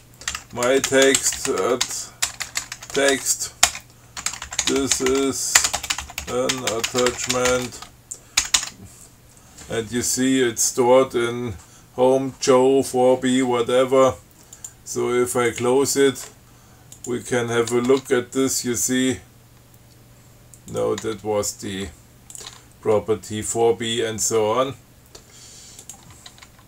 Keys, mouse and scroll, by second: 0.3-8.2 typing, 8.7 ctrl+x, 8.9 ctrl+s, 14.8 click, 15.7 click, 17.2 click, 18.1 Tab, 21.0 click, 21.3 Tab, 22.0 Tab, 22.6 click, 22.7 Tab, 26.1 click, 26.4 Tab.